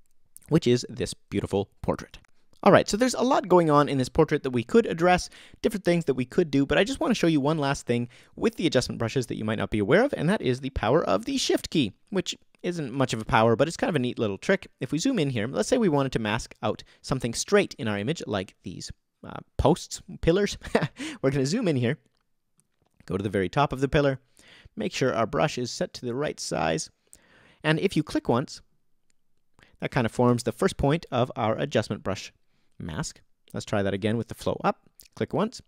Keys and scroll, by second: 30.3 o, 34.2 BackSpace.